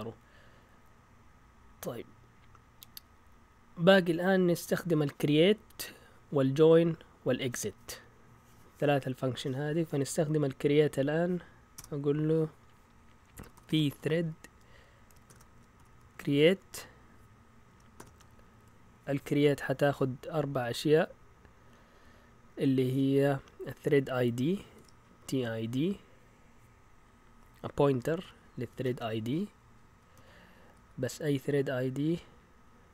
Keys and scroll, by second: 11.7 Return, 13.1-18.4 typing, 24.5-25.8 typing, 27.9 Left, 28.0 Left, 28.2 Left, 28.8-29.7 typing, 29.2 Right, 29.7 Right, 30.1 Right, 30.8 typing.